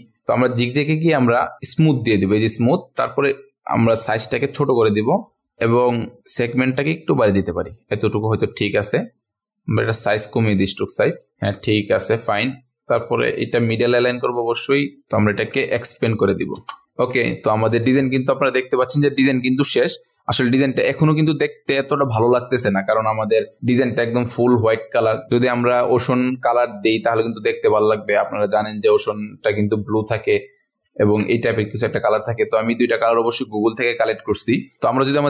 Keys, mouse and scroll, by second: 4.1 scroll down 1, 5.5 click, 6.2-8.5 scroll up 1, 8.5 click, 10.3-11.1 scroll down 1, 11.1 click, 11.3-12.2 ctrl+alt+scroll up 1, 12.2 click, 15.9 ctrl+shift+a, 16.1 ctrl+shift+x, 16.5 Return, 16.9 ctrl+alt+scroll down 1, 17.1 click, 22.8 ctrl+alt+scroll up 1, 23.6 click, 24.2 ctrl+alt+scroll down 1, 24.8 click, 30.9-31.3 ctrl+alt+scroll up 1, 31.3-33.1 drag.